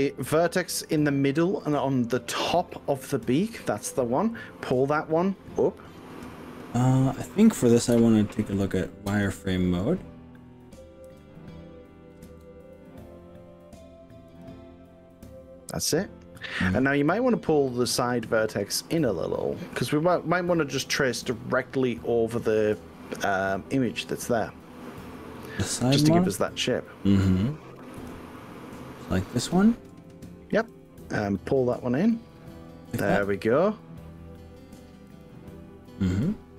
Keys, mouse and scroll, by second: 2.7 click, 7.9 z, 11.1 g, 12.3 z, 14.7-16.1 drag, 21.6-25.1 middle drag, 28.0 KP_1, 29.5 click, 30.7 g, 35.1 click.